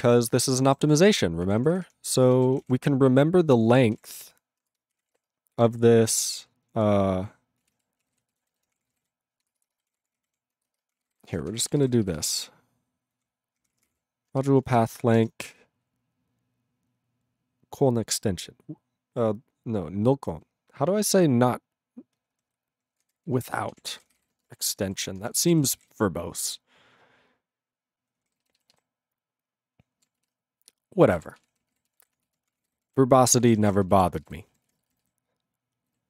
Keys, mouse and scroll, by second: 0.5 ctrl+e, 0.9 ctrl+s, 1.5 ctrl+p, 1.6 ctrl+p, 1.8 ctrl+p, 2.4 ctrl+a, 2.6 ctrl+o, 2.6 Tab, 3.7-5.6 typing, 7.4-9.6 typing, 23.4-26.4 typing, 34.1 ctrl+space, 34.2 ctrl+e, 34.2 ctrl+g, 34.8 ctrl+s, 35.0 alt+b, 35.5 alt+b, 35.9 alt+b.